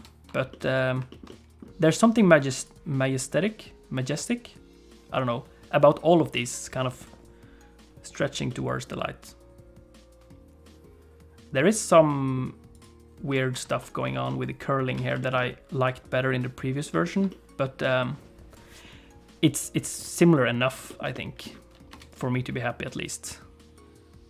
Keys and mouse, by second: 0.0 ctrl+space, 0.6 middle click, 1.3 middle click, 2.6 click, 8.5-12.4 middle drag, 12.8 click, 13.7 alt+shift+z, 14.3 middle click, 15.0 alt+a, 15.2 shift+middle click, 15.5 middle click, 17.1 shift+middle click, 17.3 middle click, 20.9 shift+middle click, 21.1 middle click, 22.0 space, 22.2-24.2 drag.